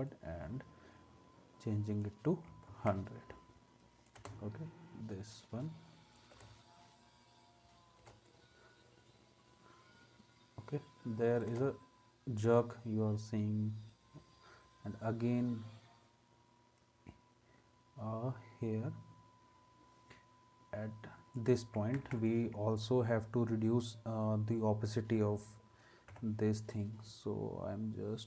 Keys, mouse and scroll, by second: 2.7 ctrl+s, 4.2 space, 6.3 space, 8.0 space, 11.5 space, 22.0 ctrl+s, 26.1 t.